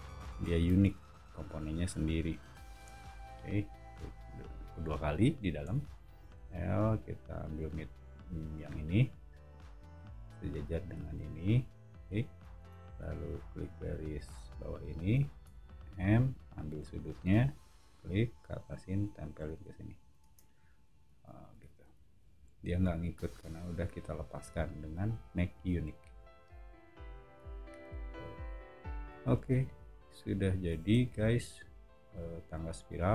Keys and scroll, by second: 0.8 space, 2.7 Escape, 5.6 l, 12.6 space, 15.4 m, 20.2 space, 20.8 Escape, 21.0 Escape, 21.2 Escape, 21.8 o.